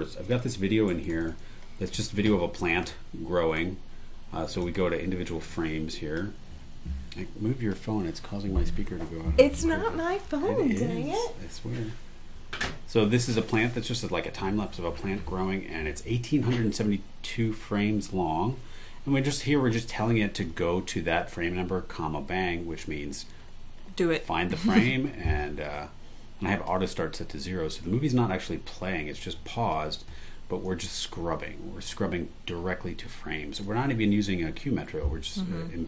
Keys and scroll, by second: 0.9 super+e.